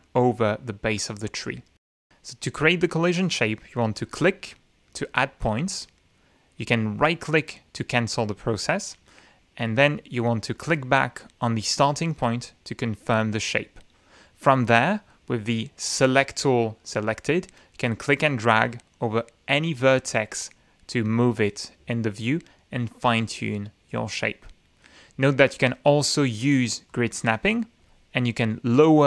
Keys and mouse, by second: 1.0 click, 1.8 right click, 4.0 click, 5.0 click, 6.0 click, 6.8 click, 7.3 right click, 9.1 click, 9.7 click, 10.5 click, 11.1 click, 12.7 click, 16.1 click, 17.9 click, 19.5 click, 20.6 click, 21.4 click, 22.5 click, 24.0 click, 26.9 click, 28.8 click.